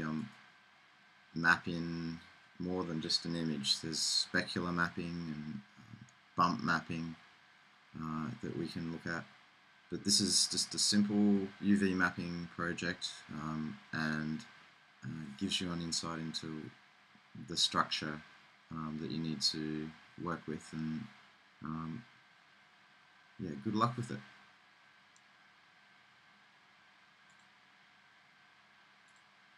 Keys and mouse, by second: 0.5-1.9 right drag.